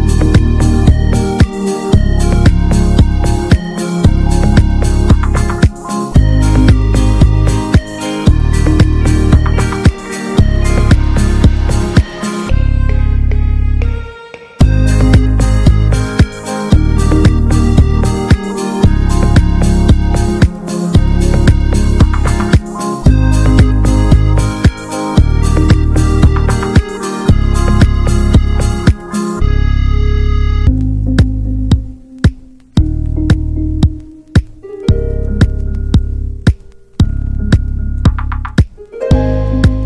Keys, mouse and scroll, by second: 0.6 scroll up 2, 0.7-5.4 drag, 5.4-5.8 scroll up 1, 5.8-8.4 drag, 8.4-9.5 middle drag, 9.5-10.1 scroll down 1, 10.1 ctrl+s, 11.0 ctrl+s, 11.6-12.3 scroll up 2, 12.3-12.9 scroll down 1, 12.9-13.8 scroll up 1, 13.8-16.6 drag, 16.6-18.2 middle drag, 18.2-19.7 drag, 19.7 middle click, 20.3 ctrl+s, 21.5-22.1 middle drag, 22.1-22.4 scroll up 2, 22.4-25.3 drag, 25.3-25.9 middle drag, 25.9-28.6 drag, 29.6-32.1 drag, 32.1 ctrl+s, 32.2-34.0 middle drag, 34.0 scroll up 1, 34.1-34.6 middle drag, 34.6 Tab, 34.8 click, 35.3 3, 35.5-36.3 drag, 36.3-38.2 scroll down 1, 38.2 click.